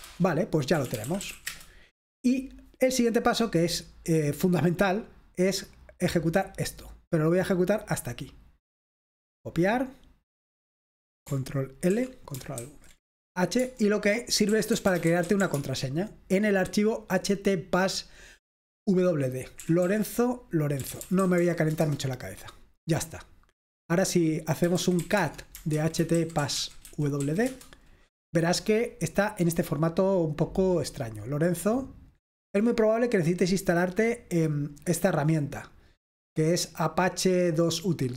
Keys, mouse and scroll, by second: 0.5-1.8 typing, 6.5-9.1 drag, 9.8 right click, 10.1-11.1 drag, 12.0 ctrl+l, 12.6 ctrl+alt+v, 13.6-15.9 typing, 19.4-21.9 typing, 24.7-27.2 typing, 27.5 Return, 29.0 typing, 30.9-32.6 drag, 33.0 click, 34.2-35.9 drag.